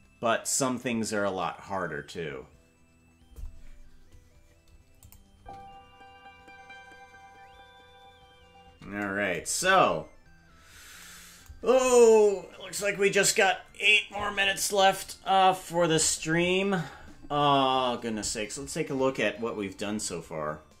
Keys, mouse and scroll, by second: 5.0 click, 5.3 space, 8.9 space, 9.5-11.0 scroll down 8, 11.0-13.7 scroll down 1, 18.1-20.8 scroll down 1.